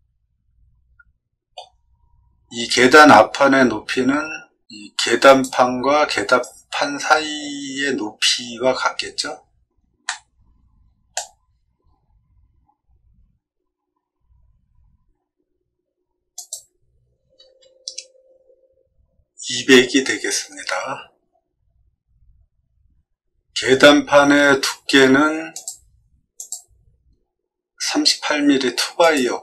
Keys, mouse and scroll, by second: 5.2 click, 10.0-11.1 middle drag, 11.4 scroll up 1, 11.8 middle click, 16.3 click, 25.5 click, 26.3 click, 28.9 click.